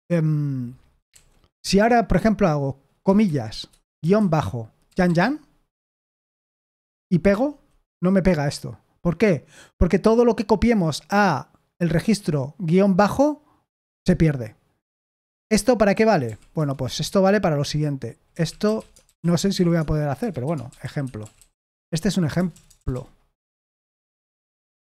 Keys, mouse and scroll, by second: 0.9 Escape, 1.1 k, 7.2 p, 15.3-16.2 typing, 16.5 Return, 18.0-24.9 typing.